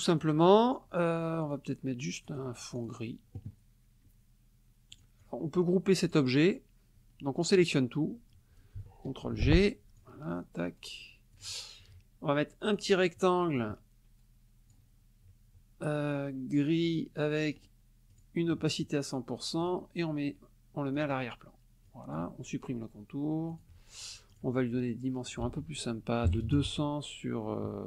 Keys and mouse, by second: 1.4 click, 2.2 click, 2.8 click, 4.9 click, 7.5-8.8 drag, 9.3 ctrl+g, 10.0-11.6 drag, 12.6 click, 13.6-14.9 drag, 16.8 click, 17.6 right click, 18.1 click, 19.6 click, 21.0 click, 21.9 click, 23.5 shift+click, 24.3 click, 25.3 ctrl+click, 25.5 ctrl+a, 26.3 KP_2, 26.7 KP_0, 26.7 Tab.